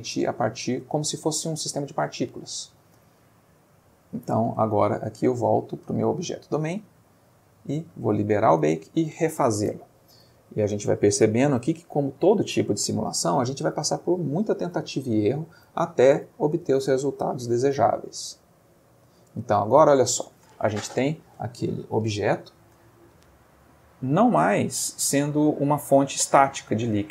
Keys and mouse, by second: 1.4-2.0 ctrl+middle drag, 4.3 Tab, 4.6 click, 5.1 Tab, 5.4 click, 6.4 middle click, 7.7 click, 8.6 click, 19.3 space, 23.8-25.3 middle drag, 25.4-26.9 ctrl+middle drag.